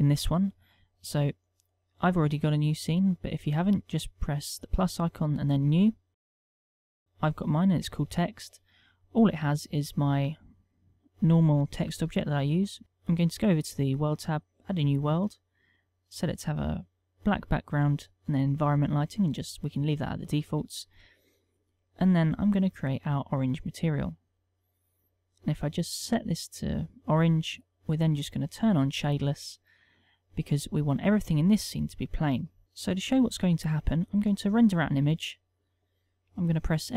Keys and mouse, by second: 3.8 click, 6.1 click, 9.3 middle click, 10.1 shift+middle click, 10.6 middle click, 11.7 middle click, 12.8 click, 13.5 click, 14.3 click, 16.1 click, 18.4 click, 21.6 click, 22.8 click, 24.2 click, 25.3 click, 27.6 middle click, 28.8 click, 29.3 middle click, 34.7 F12.